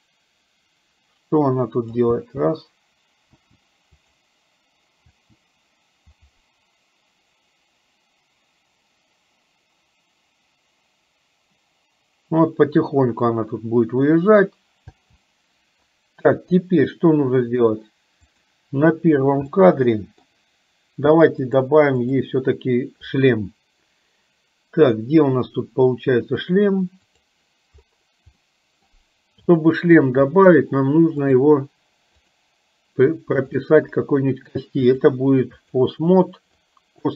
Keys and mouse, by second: 2.6 space, 3.5 space, 4.2 click, 15.0 space, 18.5 click, 19.5 middle click, 21.6 click, 27.3 click, 28.5 middle click, 29.6 shift+middle click, 32.2 click, 33.5 shift+click, 35.1-36.2 drag, 36.6 click.